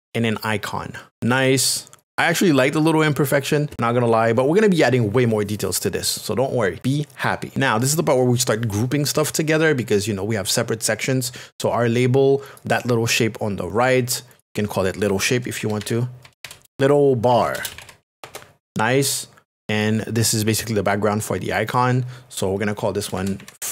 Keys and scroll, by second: 15.3-18.5 typing, 22.7-23.7 typing.